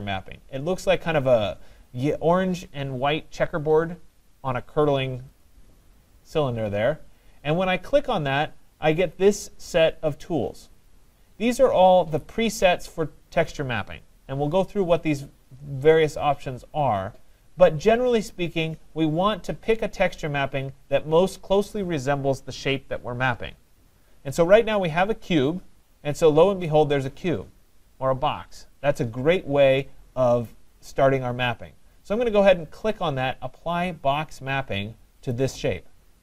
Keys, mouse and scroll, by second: 5.4 click, 5.9-10.5 drag, 35.3 click.